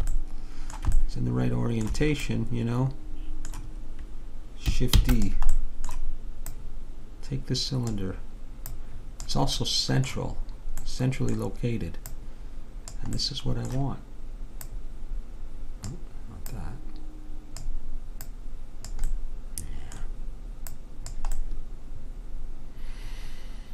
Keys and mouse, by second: 5.0 shift+d, 6.6-8.4 drag, 8.8-10.6 drag, 10.6 middle click, 12.2-20.2 drag, 19.2-21.2 middle drag, 20.8 click, 21.4-22.6 middle drag.